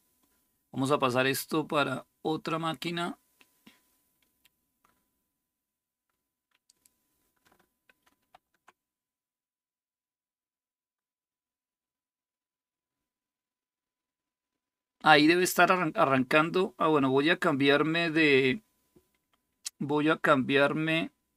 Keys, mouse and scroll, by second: 8.0 super+%.